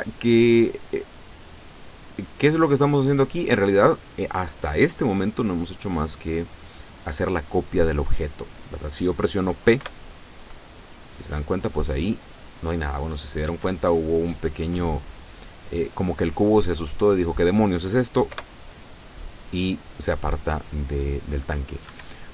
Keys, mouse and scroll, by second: 1.1-2.9 drag, 8.1 scroll down 1, 9.9 p, 13.5 Escape, 18.3 p, 22.0 Escape.